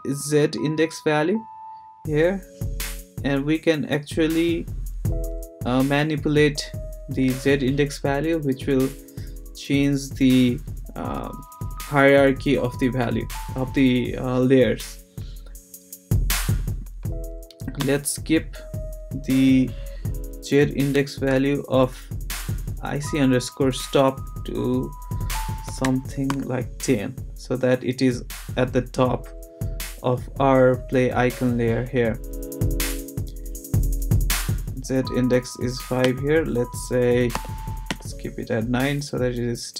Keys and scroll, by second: 17.8 Return, 25.4-26.3 typing, 36.0 Return, 37.3 9, 37.9 Return.